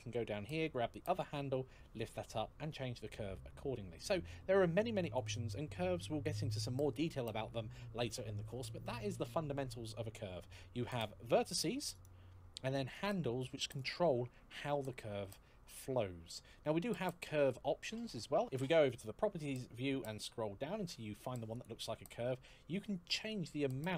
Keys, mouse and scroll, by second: 1.3 g, 4.8 click, 10.7 click, 12.7 click, 19.0 scroll down 1, 21.2 click.